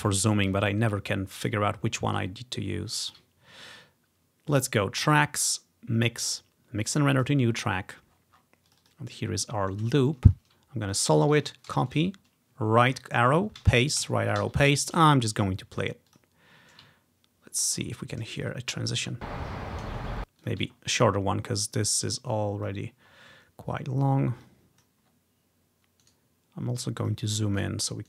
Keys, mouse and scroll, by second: 2.0 ctrl+scroll up 1, 2.7 scroll up 1, 5.2-8.2 drag, 8.2 scroll down 2, 8.8 click, 8.9 click, 10.2 ctrl+scroll down 1, 11.0 click, 11.8 ctrl+c, 12.1 End, 13.7 ctrl+v, 14.1 Right, 16.2 click, 17.1-17.7 scroll up 1, 17.7 ctrl+scroll down 1, 18.5-19.9 drag, 19.1 space, 20.2 space, 20.5 click, 20.8-22.1 scroll up 1, 21.3 typing, 22.4 click, 23.1-23.5 scroll down 1, 24.5 click, 25.2 scroll down 1, 27.9 middle click.